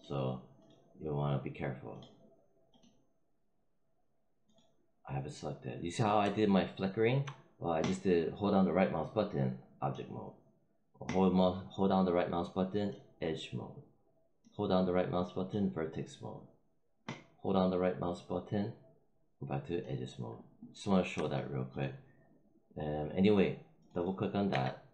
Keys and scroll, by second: 24.4 r.